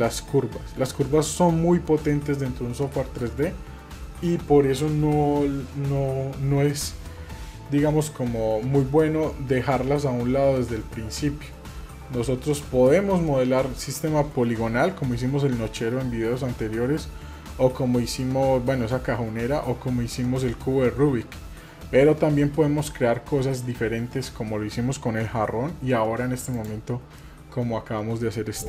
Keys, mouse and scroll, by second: 26.5 click, 27.2-28.4 middle drag, 28.6 click.